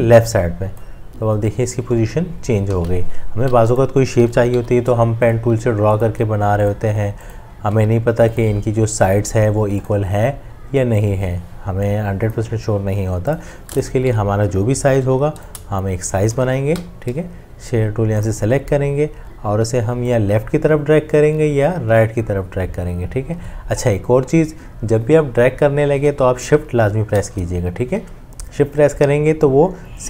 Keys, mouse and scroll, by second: 2.7 ctrl+z, 8.4 v, 14.1 Delete, 14.1-15.6 drag, 15.5 m, 26.6 shift+click.